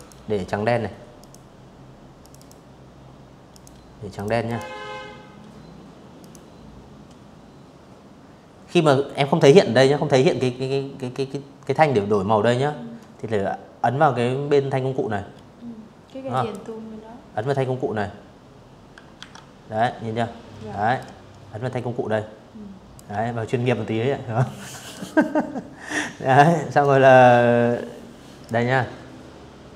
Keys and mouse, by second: 0.0 click, 1.2 click, 1.8 click, 2.1 click, 3.8 click, 14.0 click, 16.8 ctrl+1, 18.6-20.6 ctrl+drag, 21.2 Escape, 24.5-26.1 drag, 27.6-29.6 drag.